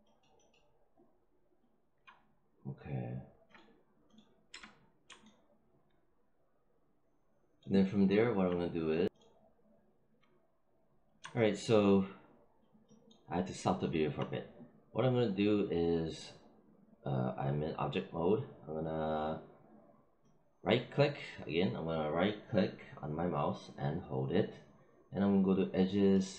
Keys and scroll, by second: 4.4 space.